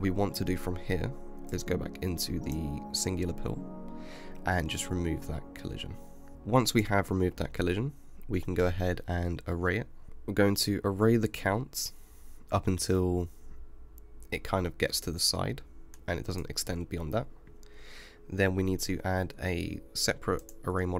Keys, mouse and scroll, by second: 1.6-3.8 drag, 3.8 space, 4.8 space, 6.3 g, 10.1-12.2 drag, 16.2-16.7 scroll down 5, 16.7-18.6 scroll up 5, 18.6 ctrl+z, 19.0 ctrl+z, 20.8-20.9 scroll down 3.